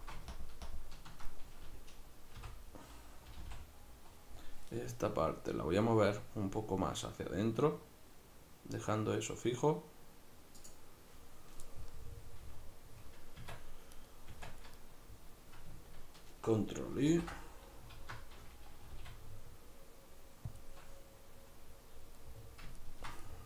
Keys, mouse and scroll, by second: 0.3 ctrl+KP_Subtract, 2.4 o, 10.7-11.9 drag, 11.9-13.4 middle drag, 13.4 Tab, 14.0 right click, 14.3 Tab, 14.8-20.6 middle drag, 17.1 ctrl+i, 18.0 alt+q, 18.8 g, 20.6 click, 22.2-23.4 middle drag.